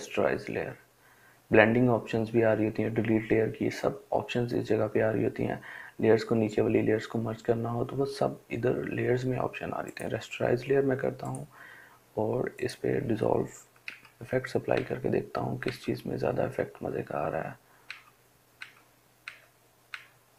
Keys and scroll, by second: 13.1 Down, 14.0 Down, 17.1 Down, 17.9 Down, 19.2 Down, 20.2 Down.